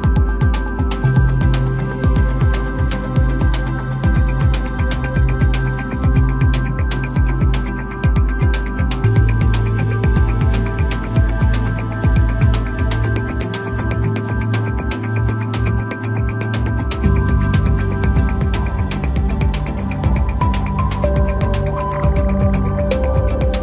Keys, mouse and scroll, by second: 0.6-1.8 scroll down 2, 1.8 click, 3.6-6.2 drag, 6.2-7.6 scroll down 5, 7.6-9.1 drag, 12.5-13.6 scroll up 4, 13.6-17.4 drag, 22.1-23.6 drag.